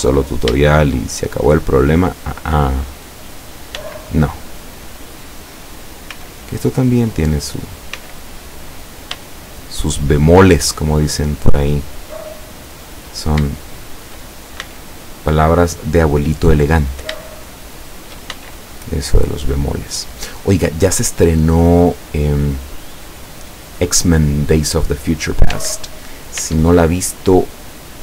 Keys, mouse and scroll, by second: 0.7-1.7 shift+middle drag, 2.0 middle click, 2.8 right click, 3.3 right click, 3.8 x, 4.3 click, 5.8 right click, 6.2 x, 6.7 click, 7.6 right click, 8.0 x, 8.6 click, 9.3-11.3 shift+middle drag, 12.8 right click, 13.8 shift+right click, 14.6 shift+x, 15.8 click, 16.9 right click, 17.8 shift+right click, 18.4 shift+x, 18.9 shift+click, 19.4 scroll down 2, 20.1-22.0 middle drag, 22.2 scroll down 1, 23.0-24.2 middle drag, 24.4-25.8 middle drag, 25.6 Tab, 26.4 Tab, 27.1-28.0 middle drag.